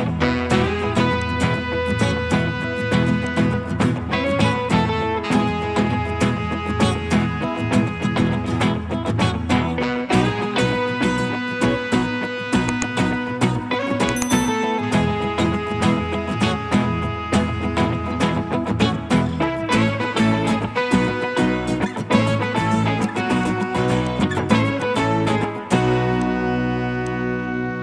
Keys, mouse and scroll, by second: 2.2 scroll down 1, 7.3 scroll down 1, 7.4 scroll up 1, 7.7 middle click, 12.0-12.5 scroll up 1, 12.5 middle click, 19.6 middle click, 19.6-20.2 scroll down 1, 20.2 middle click.